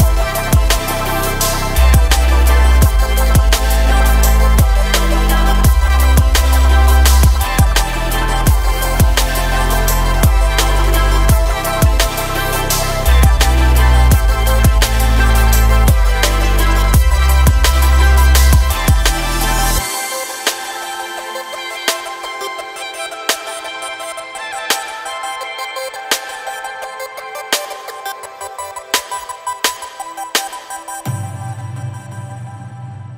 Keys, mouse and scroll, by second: 0.0-7.5 typing, 0.2 scroll up 3, 0.3 shift+middle click, 1.0 click, 1.3 click, 1.9 shift+middle click, 2.0 scroll up 2, 2.1 click, 2.2 click, 2.5 scroll down 1, 2.6 shift+middle click, 2.8 click, 3.1 click, 3.6 scroll down 2, 3.7 shift+middle click, 3.8 scroll up 2, 4.4 click, 4.8 click, 5.3 shift+middle click, 5.6 click, 6.0 click, 6.5 click, 7.1 shift+middle click, 7.3 click, 7.9 scroll down 7, 8.1 Tab, 8.2 middle click, 8.5 scroll up 2, 8.6 middle click, 8.8 3, 9.0 shift+middle click, 9.3 KP_1, 9.4 scroll up 1, 9.5 shift+middle click, 9.7 k, 11.3 click, 11.4 scroll down 2, 11.4 middle click, 11.6-12.0 scroll up 2, 12.9 click, 13.2 3, 13.3 click, 13.4 middle click, 13.5 e, 14.0 KP_1, 14.3 scroll down 1, 14.3 middle click, 14.4 ctrl+z, 14.6 ctrl+z, 14.7 scroll up 1, 14.8 middle click, 15.1 click, 15.1 middle click, 15.3 e, 15.9 middle click, 16.0 2, 16.2 middle click, 16.4 KP_1, 16.5 scroll up 1, 16.6 s, 17.3 click, 18.6 scroll up 3, 18.8-22.0 typing, 19.1 Tab, 19.1 shift+middle click, 19.5 scroll up 1, 19.6 scroll down 2, 20.0 shift+middle click, 20.4 scroll up 3, 20.6 shift+middle click, 20.9 click, 21.4 click, 23.9-27.7 typing, 23.9 click, 24.1 scroll down 1, 24.5 middle click, 25.0 middle click, 25.3 middle click, 25.6 click, 25.7 click, 26.0 click, 26.3 click, 27.2 click, 27.5 scroll up 3, 28.0 click, 28.8 click, 28.9-31.2 typing, 29.5 click, 30.0 scroll down 1, 30.2 Tab, 30.4 click, 31.1 click, 31.6 Tab, 31.7 scroll down 5, 31.7 middle click, 32.1 Tab, 32.2 middle click, 32.2 scroll up 1, 32.4 click, 32.5 middle click, 32.5 g, 32.8 2, 32.8 click, 33.0 g.